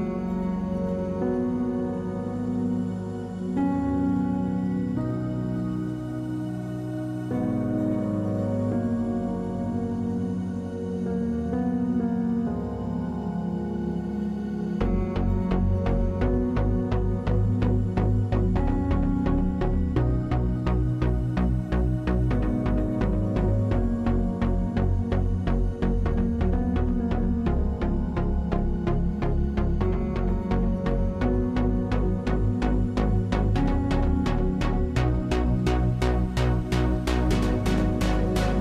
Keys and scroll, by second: 25.1 space, 26.0 space.